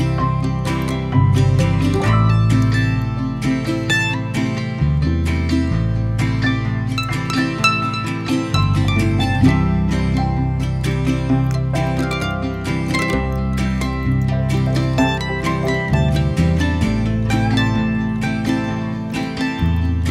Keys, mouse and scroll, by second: 1.0 3, 1.8 click, 2.2 middle click, 2.7 1, 5.5-8.5 middle drag, 9.1 alt+shift+click, 9.9-11.5 middle drag, 11.5 shift+d, 13.7 p, 14.2 p, 14.5 middle click, 14.9 Tab, 15.3 click, 16.1-16.5 middle drag, 16.5 click, 17.3 Tab, 17.8 a.